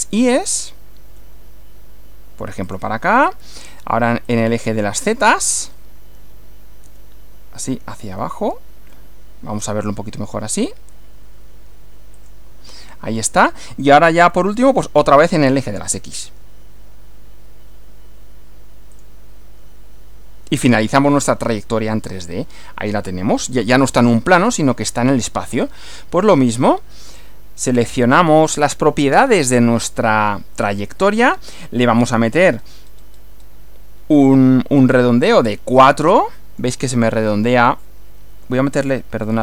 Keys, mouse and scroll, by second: 1.1 y, 2.7 click, 4.3 click, 6.9 z, 8.9-10.0 middle drag, 12.1 click, 14.3-15.7 middle drag, 16.2 x, 18.9 click, 20.7 click, 21.5-23.1 middle drag, 23.4 shift+middle click, 24.5 middle click, 26.1 middle click, 27.9 click, 32.1 click, 32.6-33.5 scroll up 4, 34.9 click, 35.9-36.8 middle drag, 38.7 click, 39.2 scroll down 2.